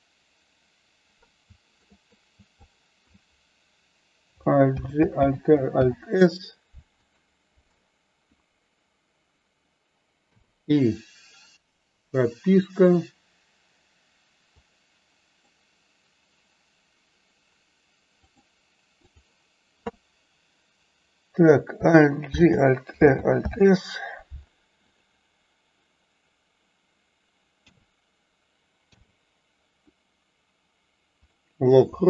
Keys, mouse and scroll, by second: 1.8 shift+middle click, 2.7 shift+click, 4.8 alt+g, 5.2 alt+r, 5.8 alt+s, 14.7 click, 18.4 click, 24.8 click.